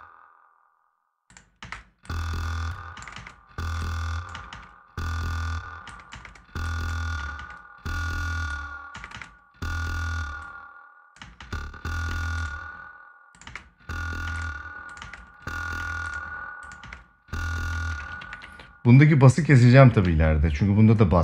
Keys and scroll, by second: 1.3 space, 2.7 space, 4.1 space, 5.6 space, 8.6 space, 10.9 space, 13.2 space, 17.9 ctrl+s.